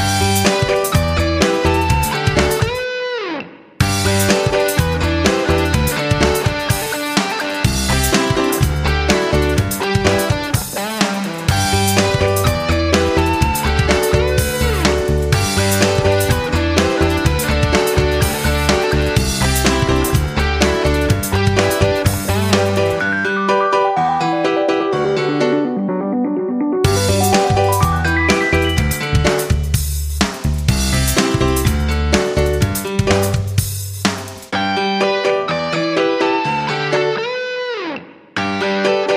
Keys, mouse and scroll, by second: 14.6 F9, 14.8 click, 22.9 2, 24.8 Return, 26.0 click, 27.9 2, 30.6 Return, 32.0 click.